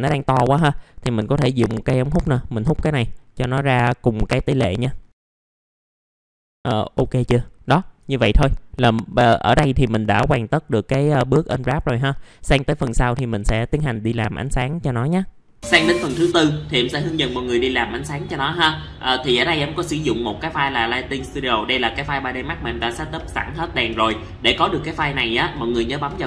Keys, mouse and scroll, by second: 0.3 scroll up 1, 1.7 middle click, 5.1 scroll up 1, 5.4 scroll down 1, 5.8 ctrl+g, 6.3 middle click, 6.7 scroll up 1, 6.9 F4, 7.4 middle click, 7.6 scroll down 1, 7.9 alt+middle click, 10.1 alt+middle click, 12.1 alt+middle click, 12.9 middle click, 13.3 alt+middle click, 14.5 right click, 15.0 click, 15.5 alt+middle click.